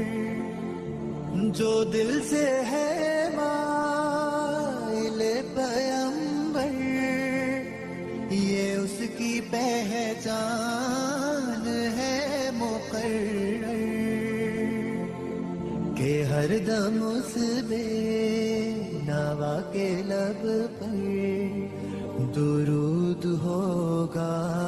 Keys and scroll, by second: 0.1 F2, 5.5 Escape, 5.7 F4, 11.4 F2, 16.4 Escape, 16.7 F4, 22.3 F2.